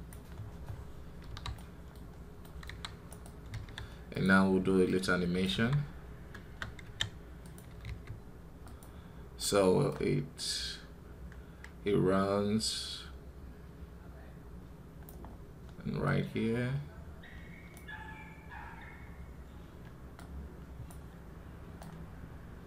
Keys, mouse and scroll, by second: 0.2-0.6 scroll down 10, 1.4-2.5 middle drag, 2.5 KP_1, 5.3 KP_3, 5.7-6.7 scroll down 2, 13.8-15.1 drag, 19.1-22.6 drag.